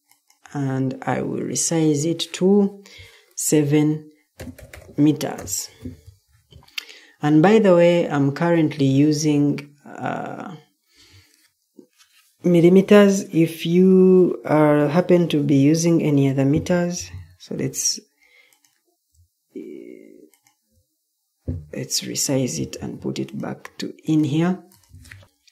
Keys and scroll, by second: 4.1-5.1 typing, 5.3 Return, 6.7 typing, 9.5-10.3 typing, 17.5 ctrl+d, 22.7 ctrl+d, 25.2 Escape.